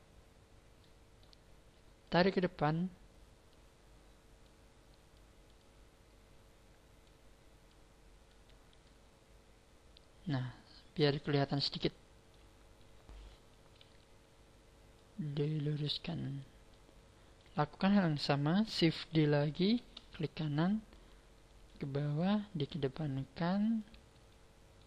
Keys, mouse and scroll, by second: 0.2 scroll down 5, 0.8 middle click, 1.4 scroll up 3, 2.0 click, 5.2 click, 5.6 click, 7.7 click, 8.8 click, 11.0 middle click, 13.8 KP_1, 14.9 click, 16.7 middle click, 17.8-18.4 scroll up 3, 19.6 shift+d, 20.2 right click, 20.8 click, 22.2 click, 24.3 shift+middle click.